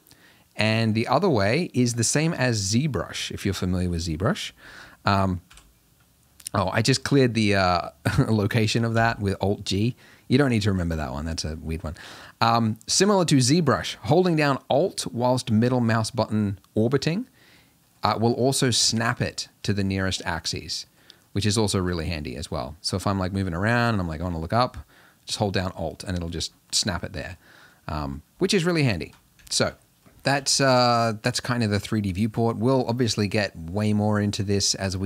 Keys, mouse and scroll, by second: 1.6-1.9 middle drag, 1.9-2.5 scroll down 6, 2.5-4.6 middle drag, 4.6 alt+g, 5.5 KP_Decimal, 6.2-6.9 scroll down 12, 8.9 alt+g, 9.8-10.2 scroll up 5, 10.6-11.2 scroll up 4, 11.2-15.5 middle drag, 16.9 alt+middle click, 17.4 alt+middle click, 17.9 alt+middle click, 18.7 alt+middle click, 19.1 alt+middle click, 19.5 alt+middle click, 20.4 alt+middle click, 20.9 alt+middle click, 21.2-24.8 alt+middle drag, 25.6-26.7 middle drag, 27.2 alt+middle click, 28.5-30.8 middle drag, 30.8 r.